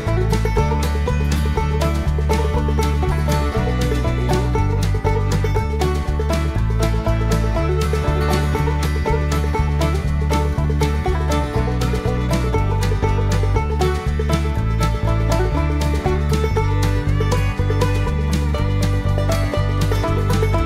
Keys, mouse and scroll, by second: 1.3 click, 2.2 click, 3.8 shift+', 5.4 ctrl+v, 6.4 click, 7.9 click, 9.5 click, 10.5 click, 11.5 click, 12.8 shift+', 14.5 ctrl+v, 15.4 click, 17.1 click, 19.4 click, 20.5 click.